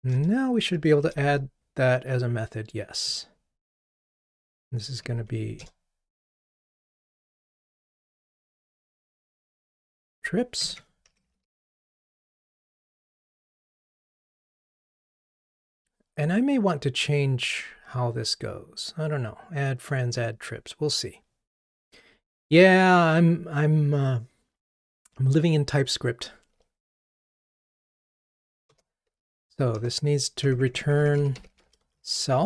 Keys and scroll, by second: 5.7 Return, 29.8 Return.